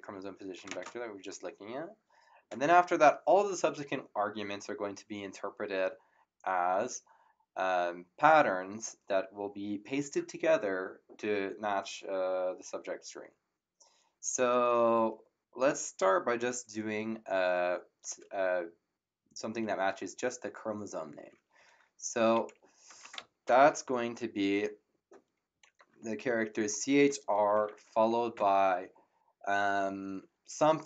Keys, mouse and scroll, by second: 0.6 <, 0.7 space, 0.7 ,, 21.5 c, 22.8 BackSpace, 25.5 c, 26.0 h.